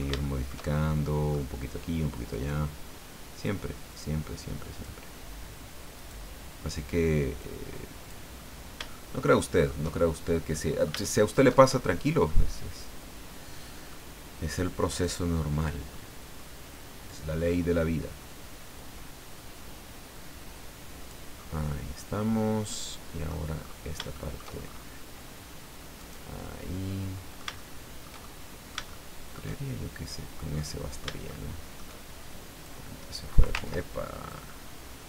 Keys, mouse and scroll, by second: 1.0 middle click, 2.3 right click, 3.4-5.0 drag, 5.9 right click, 7.4 click, 9.1 shift+middle click, 10.0 shift+scroll down 1, 10.5-11.5 middle drag, 11.6 shift+scroll up 1, 12.3-14.1 middle drag, 14.9 right click, 15.3 scroll down 1, 15.9 middle click, 17.1 click, 18.0-18.3 scroll down 1, 18.6-19.7 scroll down 3, 20.2 scroll down 1, 21.3 scroll down 1, 21.7-23.5 middle drag, 23.6-24.0 scroll up 1, 24.1 shift+middle click, 24.6-25.0 shift+scroll up 1, 26.0 right click, 26.4-29.5 middle drag, 30.6 middle click, 31.3 shift+middle click, 32.6 click, 33.5 ctrl+z, 34.3 click, 34.8-35.0 scroll up 2.